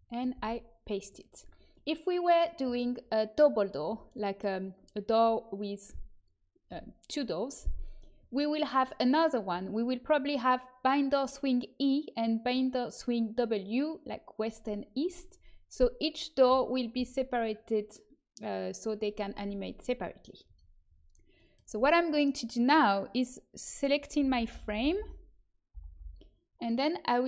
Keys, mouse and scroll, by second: 1.8-15.2 middle drag, 15.2-18.1 scroll up 1, 20.5-21.6 middle drag, 21.6 Tab, 21.9 middle click, 22.5 click, 24.1-24.9 l, 25.7 l, 25.9 l.